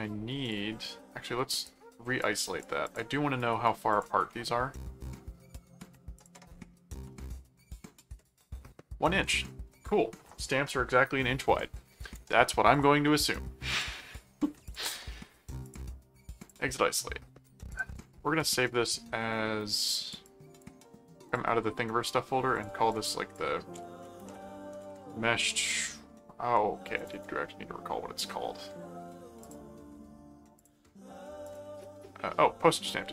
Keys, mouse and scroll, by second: 0.4 click, 1.6 right click, 2.2 click, 2.8 click, 3.9 ctrl+click, 6.2 ctrl+click, 6.6 ctrl+,, 6.9 m, 7.4 middle click, 12.7 click, 13.7 click, 14.7 click, 15.6 click, 16.4 click, 17.7 ctrl+click, 18.0 ctrl+s, 19.8 click, 21.3 click, 22.5 click, 24.0-25.4 typing, 27.0 click, 29.4 click, 30.5 click, 31.4 click.